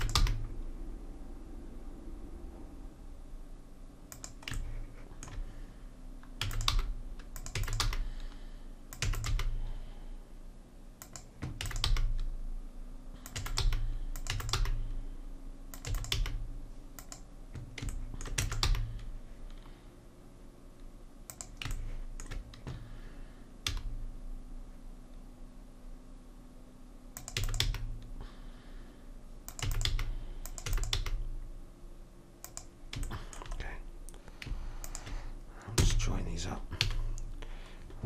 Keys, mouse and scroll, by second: 0.2 g, 6.4 e, 6.7 g, 7.6 e, 7.8 g, 9.0 e, 9.3 g, 11.6 e, 11.9 g, 13.4 e, 13.6 g, 14.3 e, 14.6 g, 15.9 e, 16.2 g, 18.4 e, 18.7 g, 23.7 g, 27.4 e, 27.7 g, 29.7 e, 29.9 g, 30.7 e, 31.0 g, 34.9 click, 35.8 f, 36.8 a.